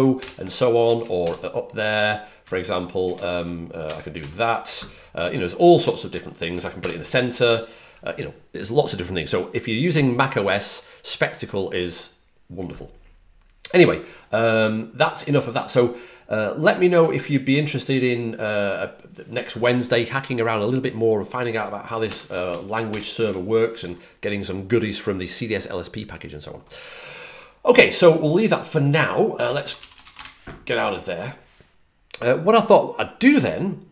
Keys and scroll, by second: 0.1 ctrl+alt+super+Left, 1.1 shift+super+Right, 2.3 shift+super+Right, 2.9 shift+super+Up, 4.1 ctrl+super+Right, 6.7 alt+super+c, 21.9-23.6 typing, 29.4-30.2 typing.